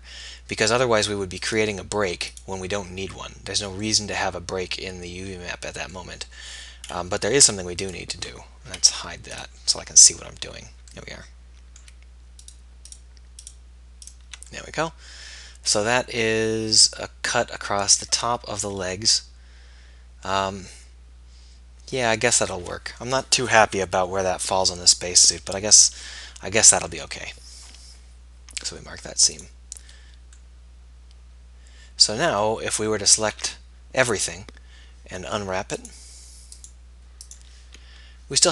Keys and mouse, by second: 1.5-3.4 right drag, 3.4-4.4 middle drag, 5.4 middle click, 7.4 Tab, 8.8 h, 9.9 Tab, 26.1-29.5 middle drag, 30.7-33.2 middle drag, 33.2 a, 33.4 a.